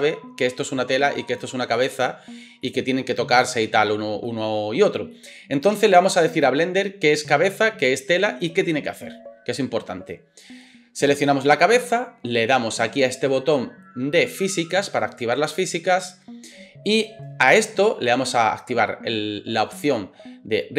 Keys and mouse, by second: 1.2 click, 1.2 middle click, 1.2 right click, 3.1 click, 3.7-5.7 drag, 3.7 middle click, 3.7 right click, 5.9-11.4 drag, 11.3 middle click, 11.3 right click, 15.6-20.7 middle drag.